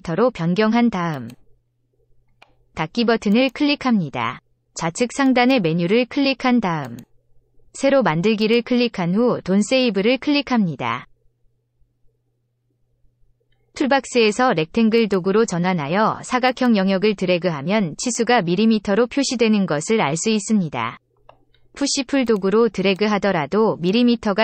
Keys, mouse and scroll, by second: 1.1 click, 3.3 click, 5.2 click, 6.8 click, 8.4 click, 14.9 click, 16.4 click, 18.0 click, 22.2 click, 22.9 click.